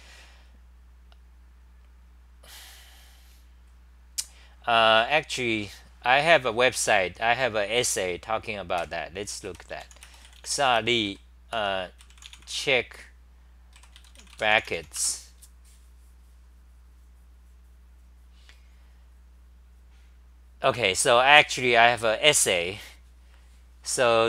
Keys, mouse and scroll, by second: 12.0 scroll down 10, 23.7-24.2 scroll down 10, 23.7 typing.